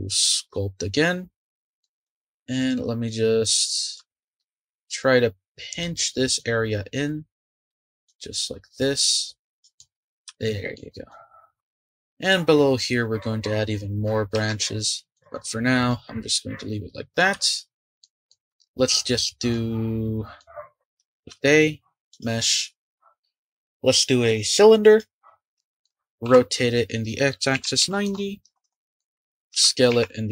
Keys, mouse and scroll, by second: 1.3 scroll up 2, 1.8-4.3 drag, 4.3 ctrl+z, 5.7-9.7 drag, 9.7 middle click, 9.9-10.3 scroll up 1, 10.3 shift+middle click, 11.1 click, 11.5-12.5 scroll up 4, 12.5-14.3 scroll down 4, 14.3 Tab, 14.7-15.1 scroll down 4, 15.1 click, 15.4-15.9 scroll up 2, 15.9-18.6 middle drag, 18.6-19.0 scroll down 2, 19.0-19.5 scroll up 2, 19.5-20.4 middle drag, 20.4 scroll down 1, 20.7 click, 21.2 shift+a, 25.4 scroll down 3, 25.5 middle click, 26.2 r, 28.9 shift+middle click, 29.5 s.